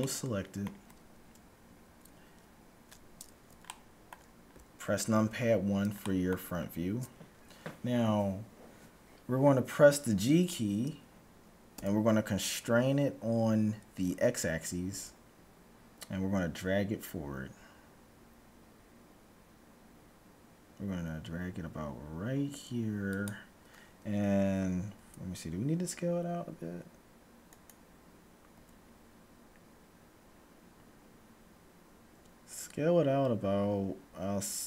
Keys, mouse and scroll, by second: 1.7 KP_1, 1.9 middle click, 3.6-8.1 middle drag, 11.7 g, 24.9 s, 28.6 s.